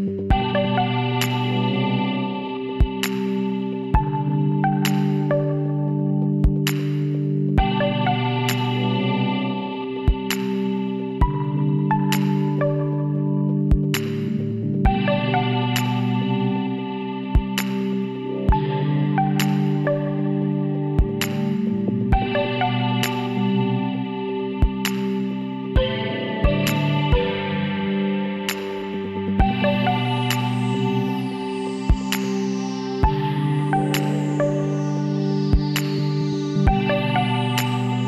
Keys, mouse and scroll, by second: 0.6-2.3 middle drag, 4.8 ctrl+z, 6.8 middle click, 8.0 KP_7, 10.0 Tab, 12.6 middle click, 13.7-23.8 middle drag, 31.5 KP_2, 31.8 KP_3, 32.5 middle click, 34.8 ctrl+r, 35.5 middle click, 36.6 click, 37.1 click, 37.8 click.